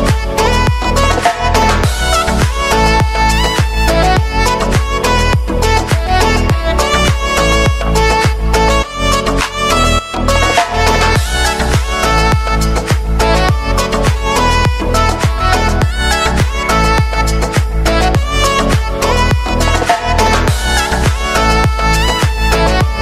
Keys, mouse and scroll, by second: 1.4-2.7 drag, 3.5 [, 4.1-6.2 drag, 7.4 ctrl+shift+c, 7.8-8.8 typing, 9.0 Return, 12.2 ctrl+z, 13.4 ctrl+shift+c, 14.2-16.0 typing, 16.3 Return, 18.4-21.1 drag, 22.5 space.